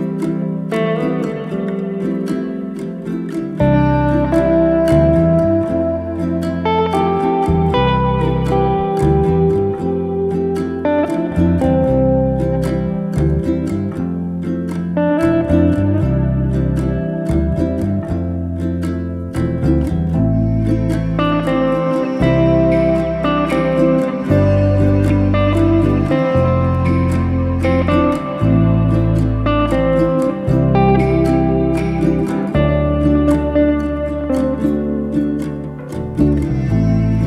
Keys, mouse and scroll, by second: 0.2 e, 5.9-7.2 middle drag, 7.2-7.6 scroll up 1, 7.6 scroll down 1, 7.8-8.8 middle drag, 8.8 1, 9.2 click, 9.7 shift+s, 11.3 shift+s, 12.0 Tab, 12.2-13.0 middle drag, 13.0 shift+a, 14.3-15.1 middle drag, 15.1 s, 16.3 s, 19.0-19.5 middle drag, 19.5 scroll up 1, 19.7-20.7 shift+middle drag, 20.7 Tab, 21.2 e, 22.6-24.1 middle drag, 24.3 Tab, 24.7 Tab, 25.2 click, 25.4-26.2 middle drag, 26.2 shift+click, 26.4-26.8 middle drag, 26.8-27.2 scroll up 1, 27.2 middle click, 27.7 KP_1, 28.8-29.9 middle drag, 29.9 click, 30.3-31.4 scroll up 2, 31.4 alt+z, 31.6 click, 32.6 s, 34.0 s, 36.5 g.